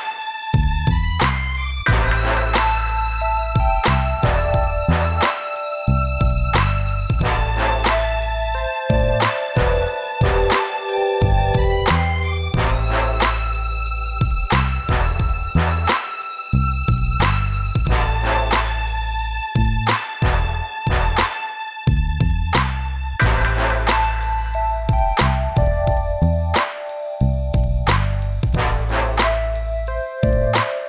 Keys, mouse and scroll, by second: 1.5 scroll up 1, 2.7 click, 5.0 click, 5.1 click, 6.2 click, 10.6 click, 10.7 click, 11.3 click, 15.2 click, 16.3 p, 19.7 scroll down 1, 20.3 click, 24.1 click, 24.2 click, 24.3 click, 25.6 click, 26.2 click, 27.1 click, 27.2 click, 27.6 scroll down 2, 29.0 click.